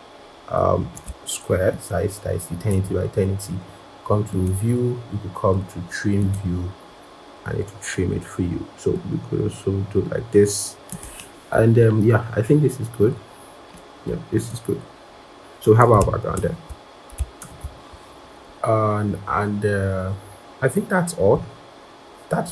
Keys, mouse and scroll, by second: 17.2 ctrl+=, 17.8-18.4 scroll, 18.9 scroll up 1, 19.1 scroll down 1, 19.7-20.3 scroll up 1, 20.6-21.2 scroll, 22.0-22.4 scroll.